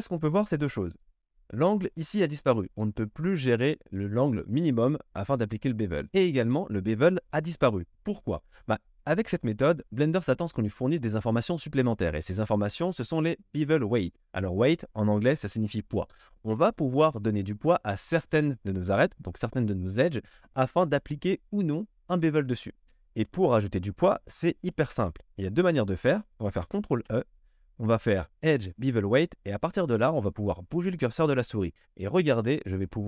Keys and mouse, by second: 26.9 ctrl+e.